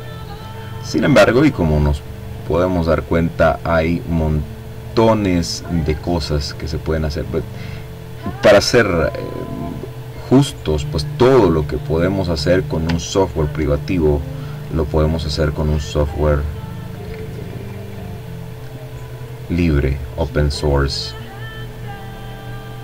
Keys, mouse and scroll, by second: 3.7 click, 4.8 click, 6.1-6.9 ctrl+scroll down 2, 7.9-8.7 ctrl+scroll down 2, 8.8-10.1 ctrl+drag, 10.4-10.9 ctrl+scroll up 1, 11.3 ctrl+click, 12.0 click, 12.9-14.7 drag, 15.0-17.1 drag, 18.0-20.7 drag, 21.4 ctrl+click, 22.2-22.8 drag.